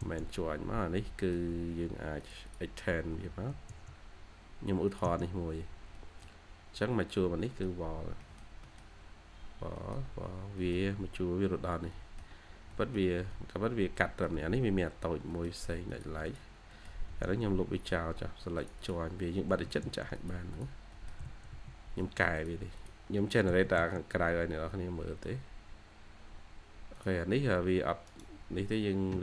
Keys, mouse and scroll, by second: 1.1 middle click, 2.4 double click, 3.0-3.4 typing, 5.1 scroll, 5.2 scroll down 1, 5.8 scroll, 5.8 middle click, 6.4-7.0 scroll up 1, 7.0 scroll down 1, 7.4 middle click, 8.3 scroll down 1, 8.5 middle click, 9.1-9.7 scroll up 1, 9.7 middle click, 10.2-10.5 scroll down 1, 10.5 middle click, 11.0-11.6 scroll up 1, 11.8 middle click, 12.4 scroll down 1, 12.6 middle click, 13.2-13.9 scroll up 1, 13.9 middle click, 14.4 scroll up 1, 14.6-15.2 scroll down 1, 15.2 middle click, 16.2 double click, 16.6 middle click, 17.0 e, 17.4-17.7 scroll up 1, 18.2-18.5 scroll up 1, 18.7 double click, 19.4 typing, 20.4 double click, 20.8 middle click, 21.1 typing, 21.9 Escape, 22.1 Escape, 22.7 double click, 23.1 middle click, 23.4 typing, 24.0 scroll down 1, 24.1-24.9 scroll up 2, 24.4 j, 24.9 j, 25.6 scroll down 1, 25.9 j, 27.2 scroll, 27.2 scroll up 1, 27.5 j, 28.0 right click.